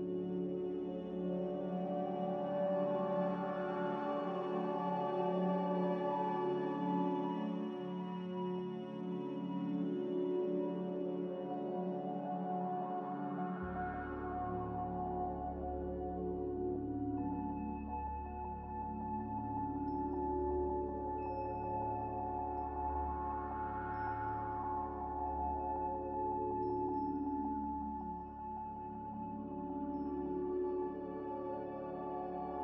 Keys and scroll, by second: 2.8 b, 3.4 Delete, 5.4 m, 6.0 n, 8.1 z, 8.6 b, 9.4 Delete, 10.7 n.